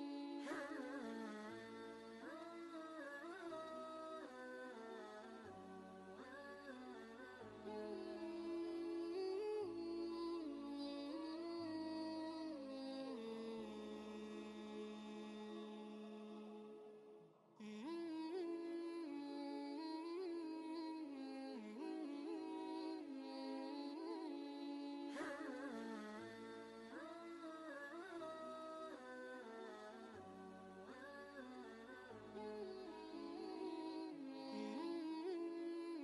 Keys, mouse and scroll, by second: 0.7 click, 1.1 space, 1.7 ctrl+space, 2.0 ctrl+click, 2.3 ctrl+space, 4.1 click, 4.5 space, 4.9-21.5 ctrl+drag, 21.5 ctrl+space, 21.6 ctrl+click, 22.0 ctrl+space, 22.7 click, 23.9 ctrl+space, 24.0 ctrl+click, 24.5 ctrl+space, 26.3 click, 27.7-36.0 shift+drag.